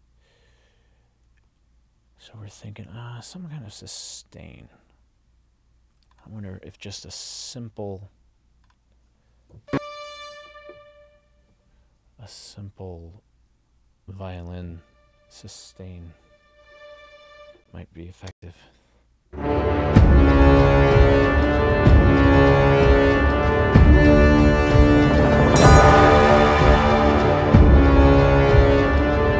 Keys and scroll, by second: 12.4 Down, 18.3 space.